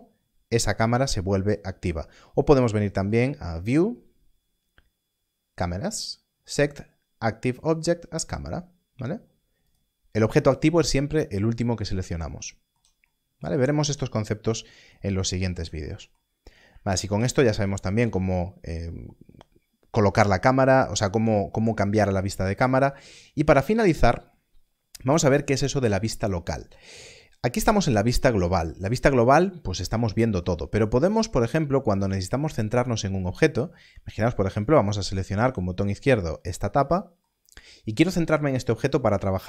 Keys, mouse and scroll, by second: 3.1 click, 9.6 click, 11.9 click, 14.0-14.9 scroll down 1, 16.3 scroll down 1, 29.1-29.8 scroll up 1, 34.6 click, 37.4 click.